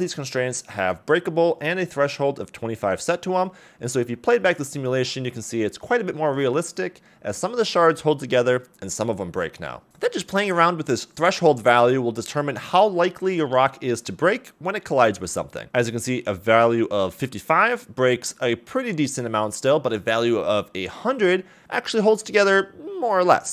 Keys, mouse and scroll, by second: 0.0 click, 0.4 a, 0.6 a, 0.9 shift+scroll down 1, 1.1 shift+middle drag, 1.5-1.9 scroll down 2, 1.7 space, 4.8 middle click, 5.2 scroll up 2, 6.3-6.9 middle drag, 7.4 middle click, 7.6 click, 7.6 space, 7.6 b, 9.3 click, 10.0 5, 11.2 right click, 12.1 a, 12.3 a, 12.4 click, 12.7 click, 12.9 click, 14.7 click, 15.1 scroll up 1, 15.5 space, 19.2 middle click, 20.3 middle click, 20.6 click, 20.6 space, 20.6 b, 21.2 0, 21.5 right click, 21.7 space.